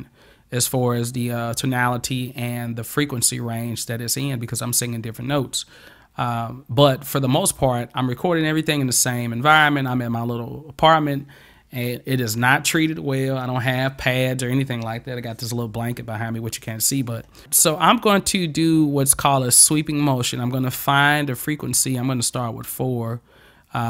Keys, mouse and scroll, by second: 21.8 click.